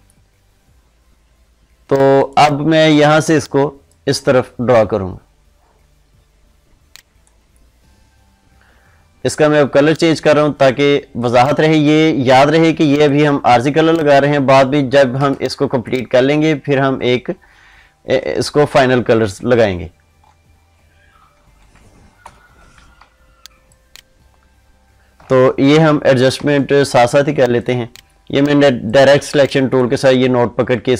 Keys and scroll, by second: 15.2 ctrl+space, 22.1 ctrl+0, 22.9 ctrl+space.